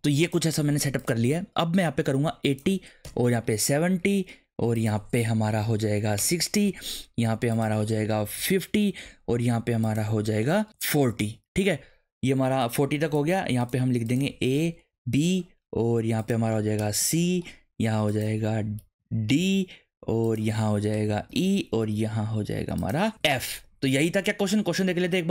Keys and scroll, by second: 3.0 BackSpace, 3.4 7, 6.2 BackSpace, 6.3 6, 8.3 BackSpace, 8.6 5, 11.1 4, 16.8 BackSpace, 17.0 shift+c, 18.8 Delete, 19.4 shift+d, 20.9 BackSpace, 21.3 shift+e, 23.1 shift+f.